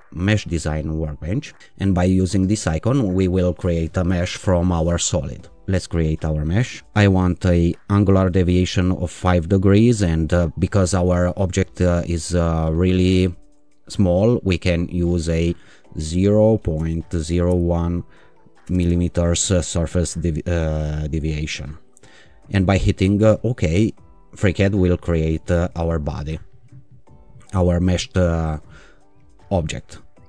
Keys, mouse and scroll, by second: 0.8-1.6 drag, 5.6 click, 14.9-16.1 drag, 16.0 0, 17.2 0, 17.5 1, 18.6 m, 23.4 click, 25.6 click.